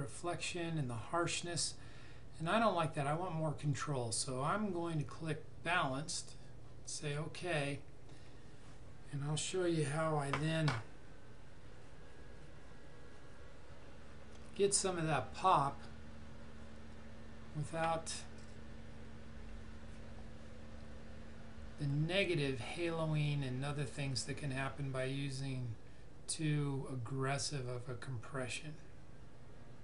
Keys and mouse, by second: 3.5 click, 6.9 click.